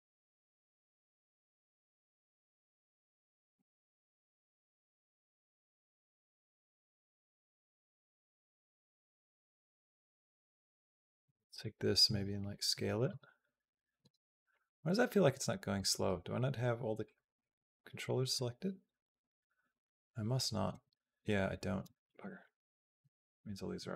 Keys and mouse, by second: 3.0 click, 3.4 space, 6.6 space, 7.0 click, 7.4 space, 8.5 space, 8.9-10.0 drag, 10.4 click, 10.8 click, 11.3 b, 11.9 s, 12.9 space, 13.8 space, 14.3-15.6 drag, 16.8 click, 17.2 click, 18.2-20.2 drag, 20.5 a, 22.0 ctrl+z, 22.4 ctrl+z, 23.0 ctrl+z, 23.7 ctrl+z.